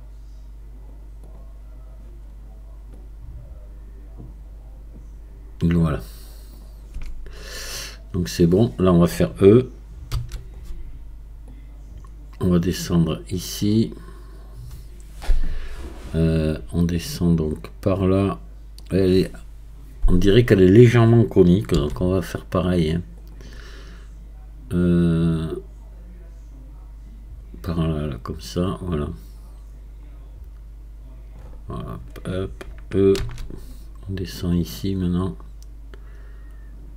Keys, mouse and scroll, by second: 1.2-9.9 drag, 10.1 e, 11.5-21.7 drag, 21.7 s, 25.4-28.4 drag, 33.2 e, 34.7-36.9 drag.